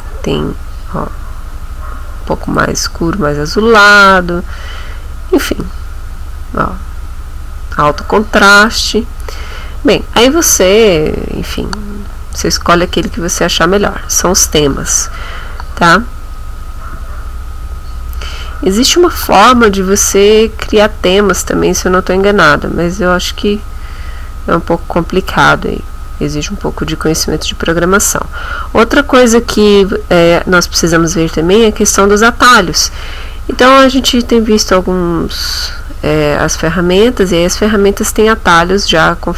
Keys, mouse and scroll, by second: 2.4 click, 5.4 click, 8.7 click, 11.5 click.